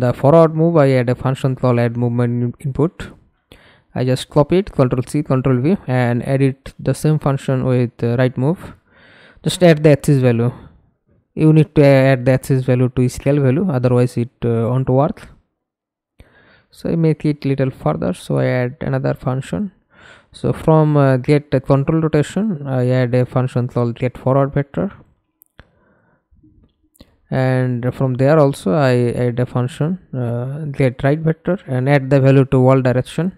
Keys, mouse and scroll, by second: 0.0 right click, 2.6 ctrl+c, 3.8 ctrl+v, 12.4 ctrl+z, 15.7-16.5 Right, 18.8-20.3 typing, 20.5 Return, 24.6-26.2 typing, 26.7 Return, 31.1-31.6 scroll down 1, 31.6 right click.